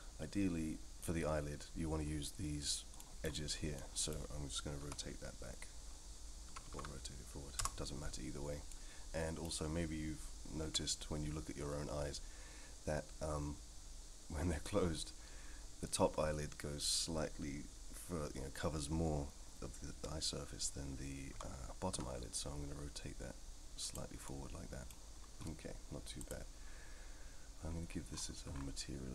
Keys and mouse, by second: 3.0 middle drag, 3.8 middle click, 4.8 r, 8.7-9.5 middle drag, 10.6 KP_3, 21.3 r, 24.2-24.9 middle drag, 26.2 click.